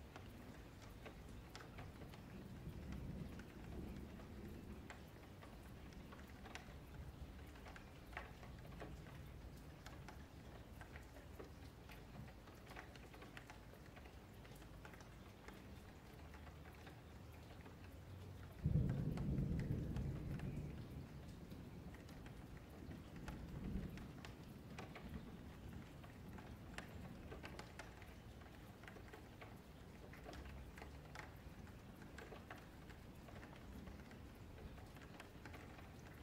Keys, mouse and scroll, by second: 0.3 click, 1.4 shift+d, 2.5 click, 4.8 2, 5.0 click, 5.9 click, 7.0 click, 8.9 middle click, 9.4-9.8 scroll up 2, 9.8 middle click, 10.5 Tab, 10.8 click, 12.5 Delete, 13.3 ctrl+z, 13.8 click, 14.6 ctrl+z, 14.7 ctrl+z, 14.9 ctrl+z, 15.1 ctrl+z, 15.3 ctrl+z, 15.6 ctrl+z, 15.9 ctrl+z, 16.3 ctrl+z, 16.6 scroll down 1, 16.9-18.6 middle drag, 18.6 3, 18.8 click, 24.9 s, 27.0 s, 28.5 ctrl+z, 29.3 s, 31.4 click, 32.5 s, 35.9-36.2 middle drag.